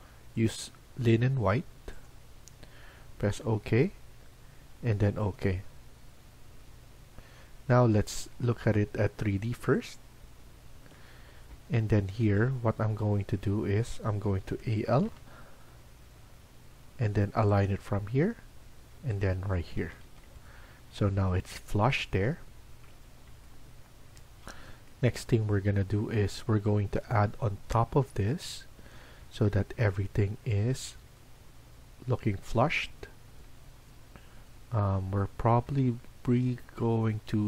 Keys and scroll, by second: 12.7 Escape, 14.4-15.0 typing, 19.7 Escape, 20.0 Escape.